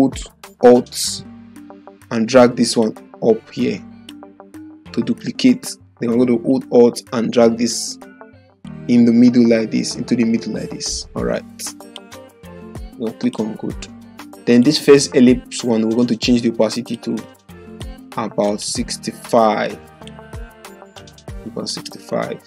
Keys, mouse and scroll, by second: 2.8-4.1 alt+drag, 6.6-8.7 alt+drag, 8.7-12.1 alt+click, 9.3 typing.